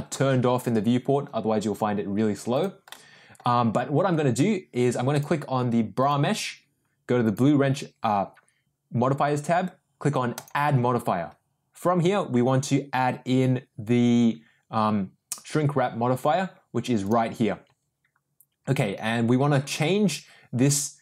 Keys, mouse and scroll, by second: 2.9 middle click, 7.2 click, 10.3-17.3 drag.